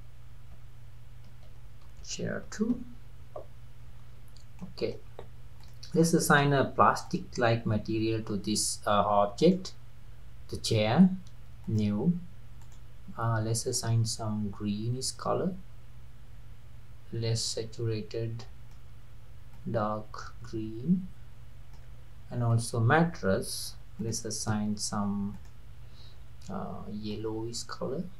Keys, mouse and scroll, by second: 4.6-4.9 middle drag, 4.9 scroll up 1, 5.1 scroll down 1, 5.6 click, 5.9 click, 7.1 click, 9.4 drag, 11.6-12.7 drag, 22.5 click, 24.0-25.5 drag.